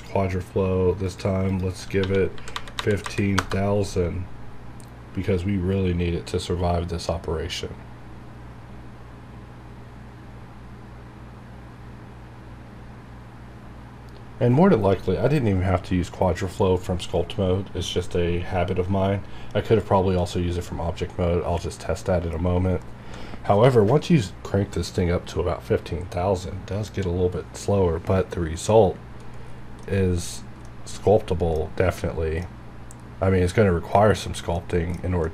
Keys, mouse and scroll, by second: 2.0 1, 2.3 KP_5, 3.3 KP_0, 3.4 KP_Enter, 5.2 click, 29.5 scroll up 1, 29.8-31.6 middle drag, 31.6-31.9 scroll up 1, 32.0 middle click, 32.5 scroll up 1, 34.2 scroll down 1, 34.6 middle click, 35.2-35.3 middle drag.